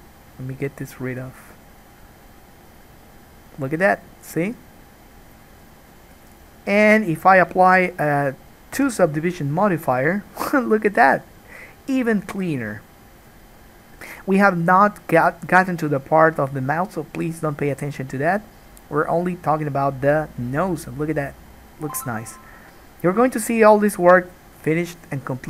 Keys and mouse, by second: 6.4-11.3 middle drag, 9.7 ctrl+2, 11.3 click, 12.0-25.4 middle drag.